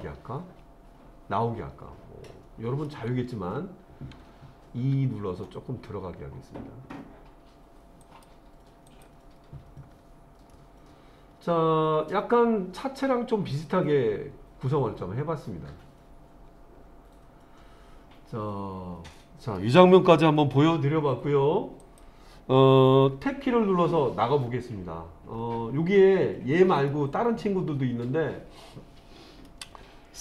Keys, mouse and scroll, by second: 4.8 e, 8.0 click, 8.9 click, 9.9-10.5 scroll down 2, 10.5-19.6 middle drag, 21.8 click, 23.3 Tab, 24.4-24.9 scroll down 2, 25.3-26.3 scroll down 1, 26.9-29.5 middle drag.